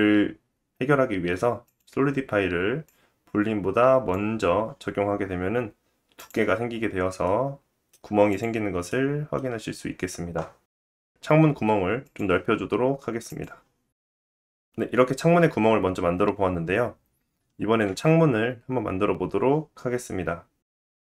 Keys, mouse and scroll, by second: 2.8 click, 4.1-6.2 drag, 6.2-8.4 middle drag, 8.4-11.4 drag, 11.6 s, 14.4 click, 15.6 middle click, 17.0 click.